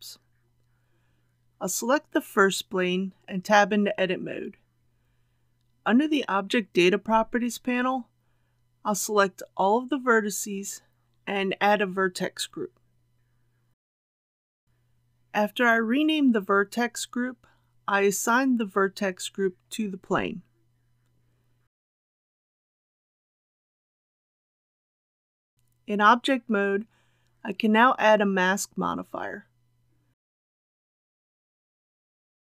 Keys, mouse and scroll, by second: 3.0 Tab, 6.8 click, 16.7-17.3 typing, 18.3 Return, 22.1 click, 25.7 Tab, 29.0-32.5 drag.